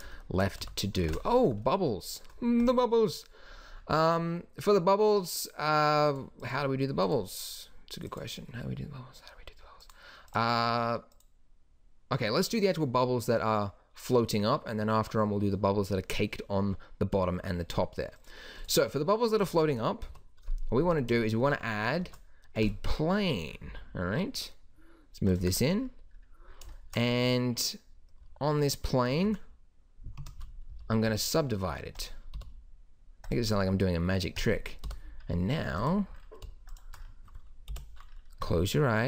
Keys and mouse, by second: 0.6 a, 1.0 ctrl+s, 6.1-15.1 drag, 18.2 click, 20.0 KP_7, 20.4 z, 20.9 z, 22.0 shift+a, 23.7 s, 27.2 Tab, 29.1 ctrl+r, 30.7 a, 31.1 w, 32.3 t, 34.8 t, 37.7 o.